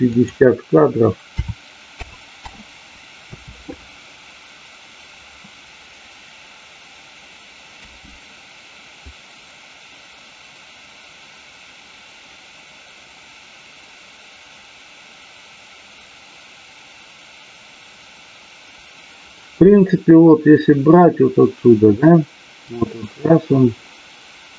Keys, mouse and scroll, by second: 0.1-2.4 drag, 9.1-24.5 drag.